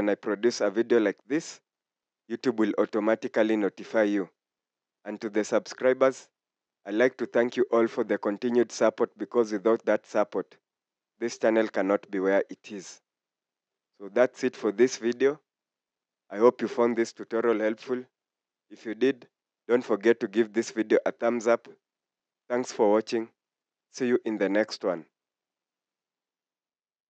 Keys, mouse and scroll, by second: 0.9 scroll up 1, 3.4 scroll down 1, 4.3 scroll up 1, 8.0 scroll down 1, 12.5 scroll down 1, 20.4 scroll down 1, 25.6 scroll up 1.